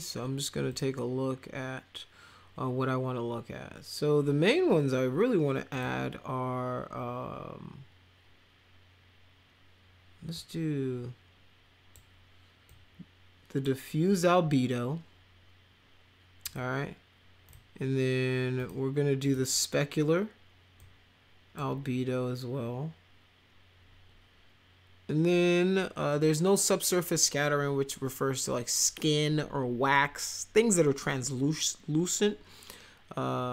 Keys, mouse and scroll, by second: 0.7 click, 5.7 click, 10.3-11.9 drag, 12.7-13.6 drag, 16.4 click, 17.5 click, 18.6 click, 19.3 click, 20.8 click.